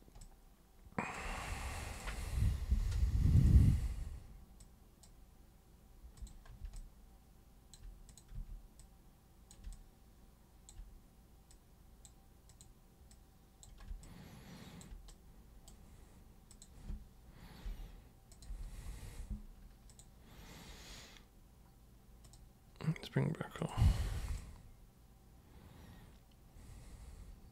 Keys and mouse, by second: 0.2 alt+super+click, 1.9 super+click, 3.4 super+click, 4.6 super+click, 6.2 super+click, 6.8 alt+super+click, 8.1 super+click, 8.4 super+w, 8.8 super+click, 9.7-10.7 alt+super+drag, 11.5 super+click, 12.5 super+click, 13.1 super+click, 14.0 alt+super+click, 15.1 super+right click, 16.5 super+click, 18.3 super+click, 19.9 super+click, 22.3 super+click, 23.6 super+click, 24.4-27.5 alt+super+drag.